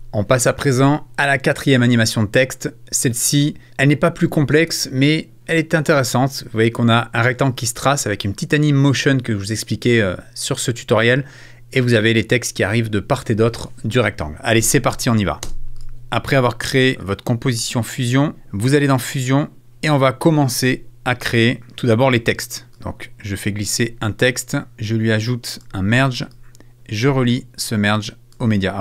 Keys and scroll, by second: 15.4 space, 16.0 alt+x.